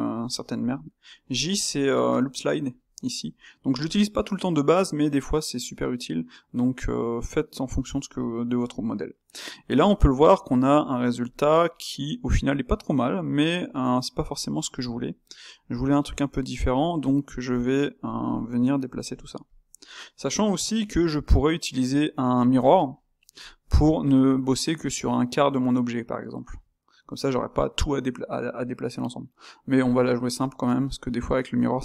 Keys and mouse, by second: 6.0-8.7 middle drag, 8.9-11.2 middle drag, 11.2 click, 11.7-15.6 middle drag, 15.6 click, 16.1 Tab, 16.5 click, 17.2 click, 17.7 middle click, 18.2 shift+click, 18.5 middle click, 19.1 shift+click, 19.4 shift+click, 19.7-20.8 middle drag, 20.8 g, 22.7 Tab, 22.8-31.8 middle drag.